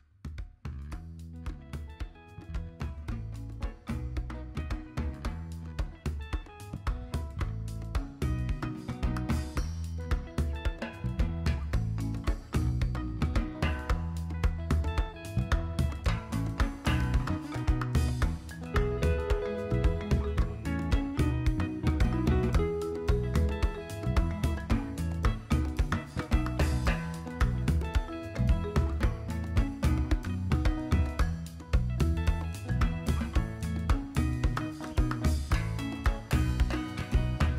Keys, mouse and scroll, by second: 0.0 KP_3, 2.2 super+c, 2.3 super+v, 3.2-4.2 drag, 4.7 s, 5.8 click, 7.3-8.6 drag, 10.3 KP_7, 11.6 Tab, 12.2 Tab, 12.5 `, 13.9 shift+click, 15.7-17.2 drag, 20.8 click, 22.8 KP_7, 23.9 super+c, 24.1 super+v, 24.6-25.0 shift+middle drag, 25.6-28.1 drag, 28.7 KP_7, 29.5 KP_7, 29.5 KP_1, 30.5-30.9 shift+middle drag, 31.5-33.2 drag, 35.4-35.7 shift+middle drag, 37.0 click, 37.2 middle click.